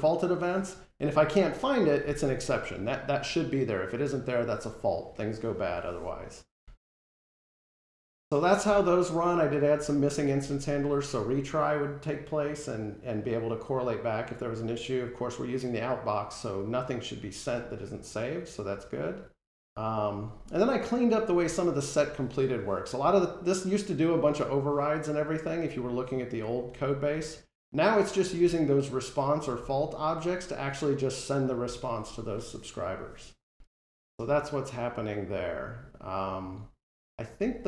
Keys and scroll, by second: 37.5 ctrl+Tab.